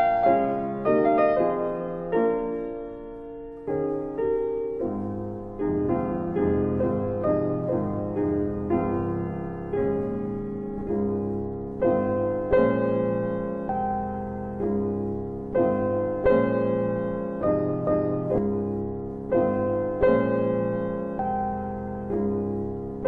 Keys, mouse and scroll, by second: 0.4 alt+right click, 0.5 alt+click, 1.5 alt+click, 1.9 alt+middle click, 2.4 alt+middle click, 2.5 alt+click, 3.9 alt+click, 4.3 ctrl+z, 5.8 click, 6.2 click, 6.4 BackSpace, 8.4 click, 11.1 click, 16.1 alt+click, 16.4 alt+click, 16.7 alt+right click, 16.9 alt+right click, 17.3 alt+click, 18.0 alt+click, 18.0 alt+right click, 18.1 alt+right click, 18.4 alt+middle click, 18.6 alt+middle click, 19.7 click.